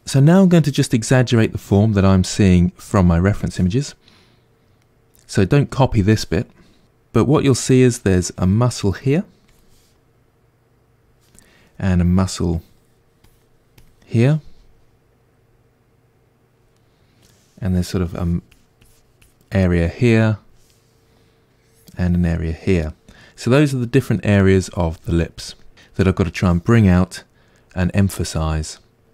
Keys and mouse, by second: 3.4-4.8 drag, 4.8-7.5 middle drag, 7.5-16.8 drag, 16.8 middle click, 17.7-22.9 drag, 22.9-29.1 middle drag.